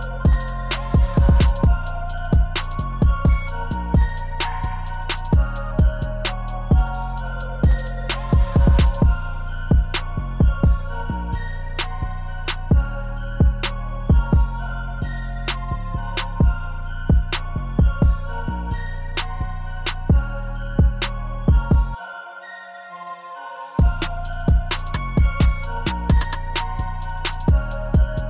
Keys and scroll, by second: 10.7 0, 13.9 0, 22.1 ctrl+z.